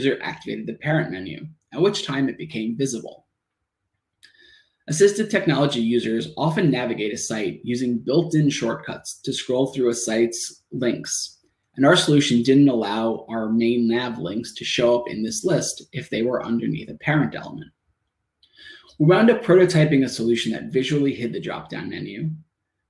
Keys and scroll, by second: 2.6 Tab, 6.2 Return, 7.4 Tab, 9.5 Tab, 11.9 shift+Tab, 18.3 Return, 19.4 Tab.